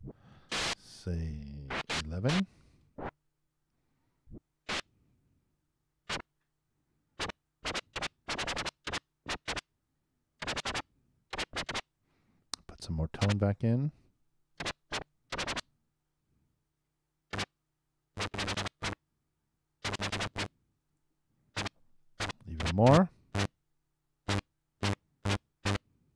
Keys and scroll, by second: 3.1 super+space, 6.0 super+Return, 15.3 super+2, 15.6 super+Return, 22.6 super+6, 22.8 super+Return.